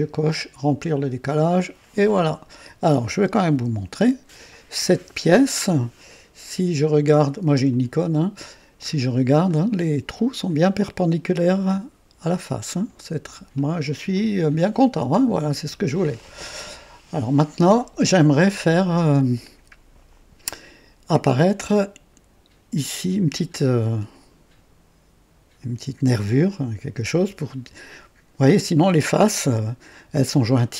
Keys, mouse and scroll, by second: 0.2 click, 1.3 click, 2.1-3.1 drag, 3.5 KP_3, 4.9 KP_1, 7.7 click, 8.9 scroll up 1, 9.5 right click, 13.2 &, 14.1-15.1 drag, 15.2-15.9 scroll down 2, 16.2-16.9 drag, 17.4-17.7 scroll up 1, 18.2-19.0 right drag.